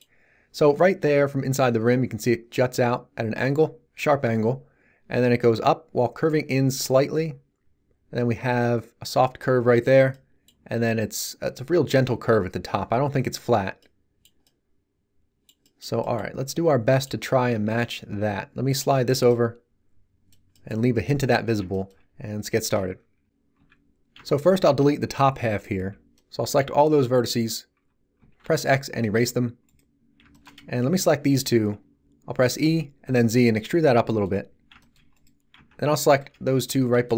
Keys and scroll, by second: 23.5 z, 25.7 b, 27.8 z, 28.4 x, 32.5 e, 33.0 z.